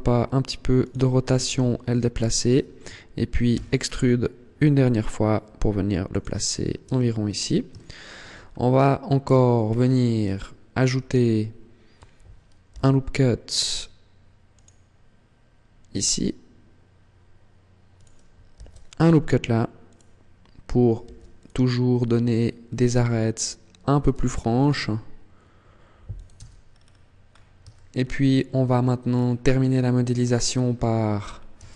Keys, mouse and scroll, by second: 0.6 click, 1.2 g, 1.9 click, 3.3 e, 5.9 click, 6.2-6.6 scroll down 2, 6.6 Tab, 7.5 shift+middle click, 8.1 scroll up 3, 9.0 Tab, 9.4 scroll up 2, 10.1 shift+middle click, 10.9 scroll up 2, 12.5 ctrl+r, 17.7 click, 18.3 ctrl+r, 19.7 click, 20.8 ctrl+r, 22.5 click, 24.0 ctrl+r, 26.1 Tab, 26.1 click, 26.4-26.7 scroll down 4, 27.0-27.4 scroll up 3, 27.5 shift+middle click, 28.8-29.6 scroll down 6, 30.3 scroll up 3, 31.0 scroll up 3, 31.3 Tab.